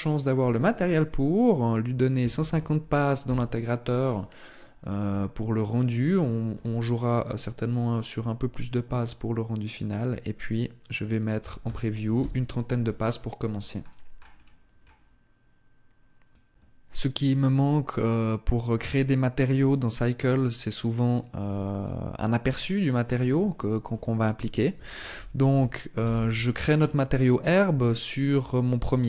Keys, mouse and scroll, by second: 18.5 right click, 20.7 click, 27.8 right click.